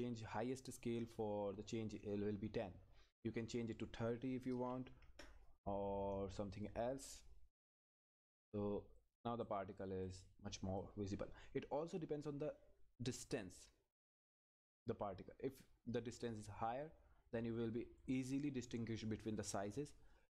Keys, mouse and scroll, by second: 3.5 click, 6.5 click, 9.4 click, 11.6 scroll down 1, 15.5-16.0 scroll up 1, 16.0 click.